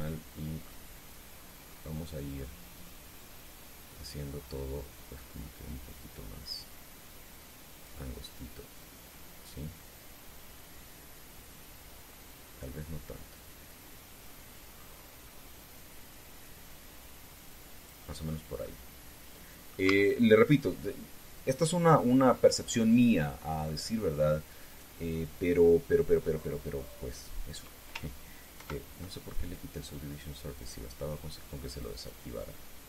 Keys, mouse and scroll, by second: 0.3 click, 1.0-1.7 scroll down 4, 1.4 middle click, 2.1 scroll down 2, 2.8-3.2 scroll down 2, 3.4 scroll down 1, 3.9 scroll up 1, 9.5-11.6 drag, 11.6-12.0 scroll down 1, 12.3 scroll down 1, 12.8 scroll up 1, 14.9-15.3 scroll up 1, 15.5-15.9 scroll down 1, 16.4 scroll down 1, 18.9 scroll down 2, 19.4-20.6 middle drag, 20.6 Tab, 21.1-24.6 middle drag, 25.4 right click, 29.3 ctrl+2, 31.3 click, 32.7 right click.